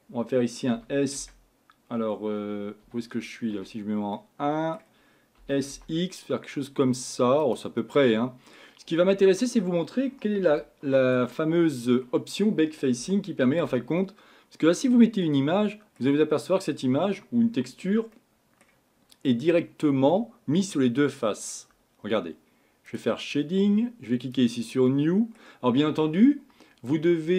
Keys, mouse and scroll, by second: 0.7 s, 3.6 KP_1, 4.2-5.4 middle drag, 5.4 s, 7.8-9.1 middle drag, 9.1-9.9 scroll up 5, 9.9 scroll down 2, 10.6-17.0 shift+middle drag, 18.1-22.9 middle drag.